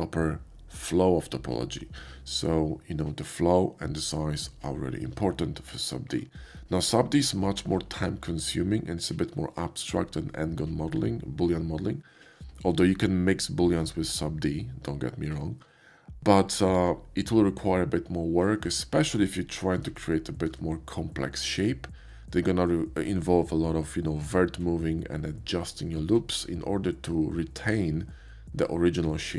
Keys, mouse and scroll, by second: 5.7 middle click, 6.6 middle click, 7.7-15.6 drag, 20.1-20.5 shift+middle drag.